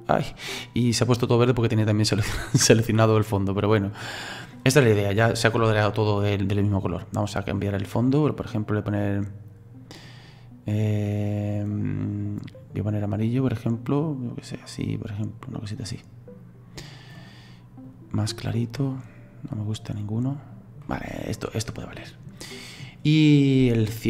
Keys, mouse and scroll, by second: 0.9-6.1 middle drag, 10.0 click, 11.8 click, 13.0 click, 21.2-24.0 middle drag.